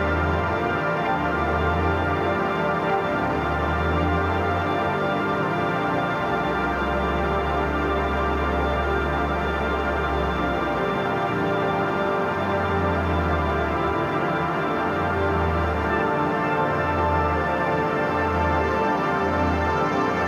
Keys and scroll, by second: 0.0-3.1 typing, 4.2 ], 4.9 [, 6.7 ctrl+z, 7.7 ctrl+z, 11.7 x, 14.3 ], 14.6 [, 15.9 [.